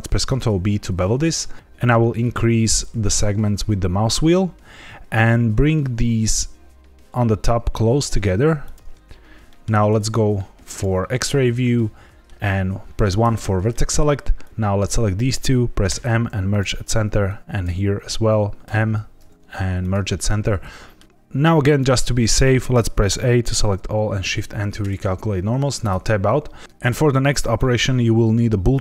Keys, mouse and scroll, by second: 0.2 ctrl+b, 1.5-2.2 scroll down 4, 2.2-3.5 scroll up 3, 4.7-5.3 scroll up 1, 8.6 click, 9.0 scroll up 2, 9.4 shift+middle click, 10.6 click, 11.7 middle click, 13.2 1, 13.6 middle click, 14.4 click, 15.8 m, 17.2 click, 18.6 m, 20.6 middle click, 21.0-21.6 scroll down 1, 22.7 a, 24.1 shift+n, 25.8 Tab.